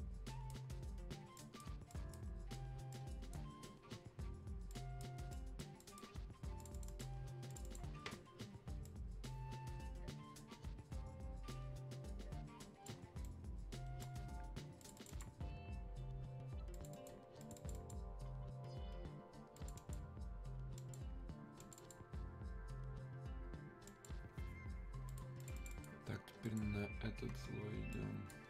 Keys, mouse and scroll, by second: 1.4-4.7 drag, 4.7 click, 5.3-13.2 drag, 13.2-14.8 drag, 14.8 click.